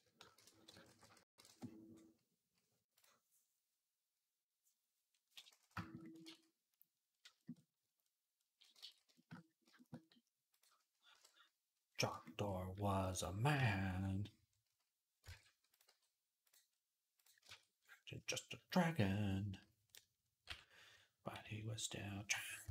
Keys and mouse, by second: 6.1 ctrl+s, 7.4-10.3 drag, 8.7 ctrl+s, 11.0 KP_1, 11.7-13.7 shift+middle drag, 13.5 ctrl+Tab, 15.2 ctrl+Tab, 15.7 g, 16.6-21.5 middle drag, 17.0 click, 17.2 ctrl+Tab, 20.3 m, 21.2 i, 21.6-22.1 [, 22.5 [.